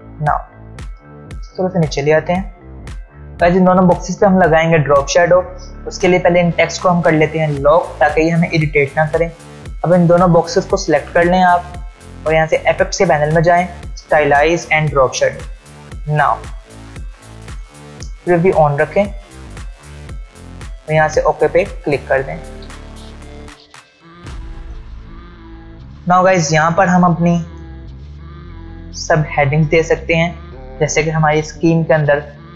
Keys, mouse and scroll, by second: 0.7-1.9 drag, 2.8 alt+scroll down 1, 4.2 alt+scroll up 1, 4.3 alt+scroll down 1, 6.4 click, 7.5 shift+click, 8.9 ctrl+2, 10.5-11.2 click, 15.6-16.8 ctrl+alt+scroll down 1, 19.1 click, 22.8 alt+scroll down 1, 23.6 space, 23.7-24.3 click, 25.8 alt+scroll down 1, 26.1 space, 26.2 click.